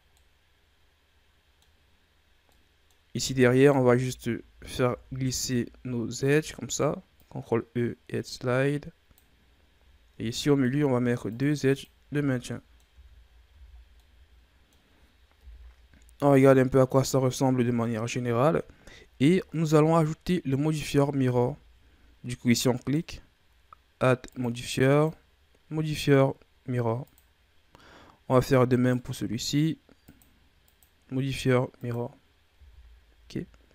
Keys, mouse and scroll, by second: 0.1-3.4 middle drag, 3.4 alt+right click, 4.7 ctrl+e, 10.0 ctrl+r, 12.0 a, 12.2 scroll down 1, 12.4 middle click, 12.8 Tab, 13.2 scroll down 3, 13.4 a, 13.9-15.3 middle drag, 15.3 KP_1, 16.5-18.5 scroll down 5, 18.5-19.0 scroll up 2, 19.0-19.5 scroll down 2, 19.5-20.4 scroll up 4, 20.4-20.8 scroll down 2, 20.8-21.4 shift+scroll up 4, 21.4-22.7 scroll down 2, 22.7 right click, 24.2-27.9 drag, 28.1-28.7 scroll up 2, 28.7 right click, 29.9-32.4 drag, 32.4 a, 32.9-33.7 scroll down 2.